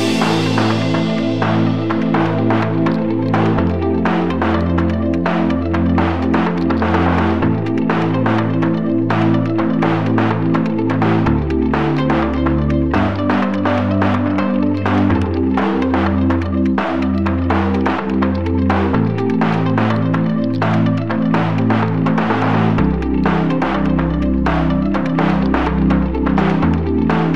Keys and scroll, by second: 0.0-5.3 typing, 6.5 space, 7.3 a, 11.6 ctrl+space, 11.7-13.6 typing, 22.6 a, 26.3 space, 26.4 a.